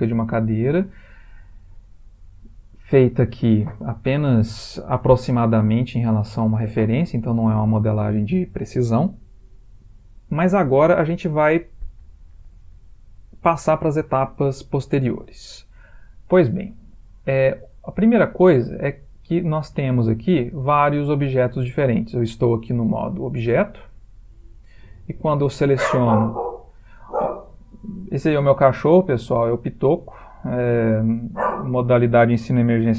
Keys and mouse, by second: 0.7 middle click, 6.5 middle click, 19.2 click, 19.7 g, 20.9 click, 21.1 g, 25.0 click.